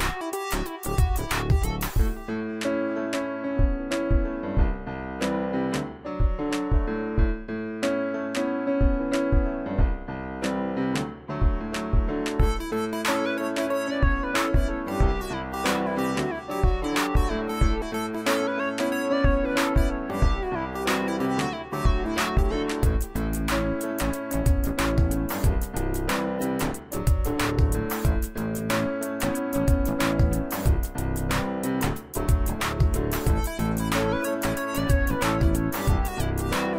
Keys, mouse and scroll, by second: 2.2 right click, 3.6 click, 3.8-8.0 drag, 14.1 click, 20.3 ctrl+z, 21.0 click, 21.2 click, 24.5 click, 24.6 scroll up 1, 26.6 click, 30.2 right click, 31.2 click, 32.0 space, 32.1 click, 32.5 space, 35.0-36.7 drag.